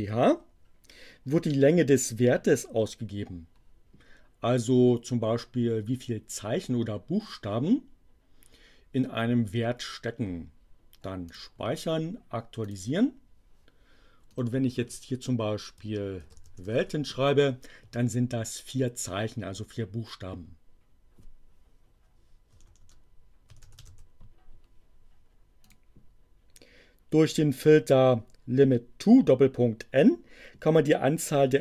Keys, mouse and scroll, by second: 11.2 click, 12.7 click, 14.3 click, 16.0-17.1 typing, 22.5-24.3 typing, 25.7 click.